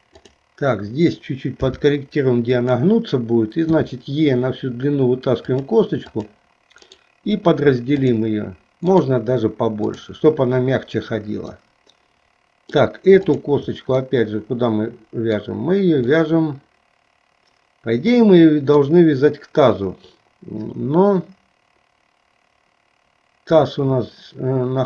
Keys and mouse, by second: 0.1 click, 1.6 g, 3.8 e, 6.1 click, 7.0-8.3 right drag, 9.1-10.1 right drag, 11.7-12.9 middle drag, 13.4 click, 14.2-15.5 middle drag, 16.3-19.0 middle drag.